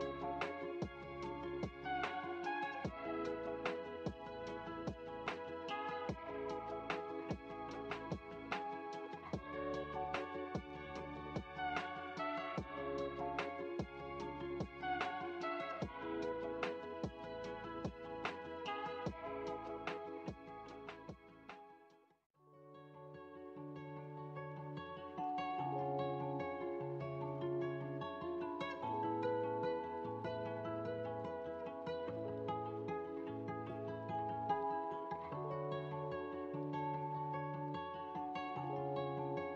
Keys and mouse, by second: 0.0 click, 1.6 click, 2.4 middle click, 3.4 x, 5.6-7.2 drag, 18.7-21.6 drag, 22.8 middle click, 25.9-27.3 drag, 28.0-37.5 drag, 38.0-39.5 drag.